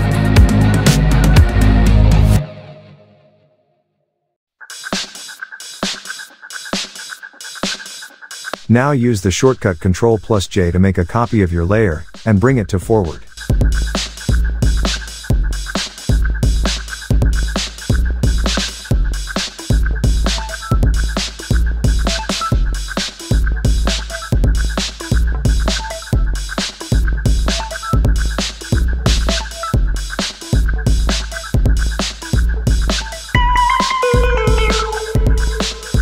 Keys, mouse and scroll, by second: 0.8 ctrl+t, 1.6-5.7 drag, 6.2-8.4 drag, 9.9 ctrl+j, 10.3-12.6 drag, 18.0 Tab, 18.9 click, 21.7 alt+scroll up 1, 22.2 space, 22.2-22.9 click, 22.5 space, 23.3 click, 26.0 alt+scroll up 1, 26.6 click, 31.0 Home, 31.2 shift+End, 32.3 click, 35.8-36.0 drag.